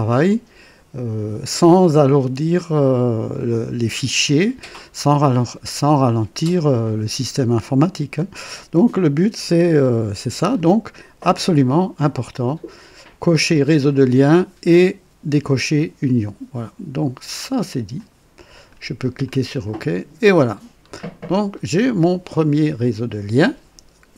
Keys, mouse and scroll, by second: 17.9-18.9 drag, 19.2 click, 20.3-21.1 scroll down 4, 21.5-22.5 right drag.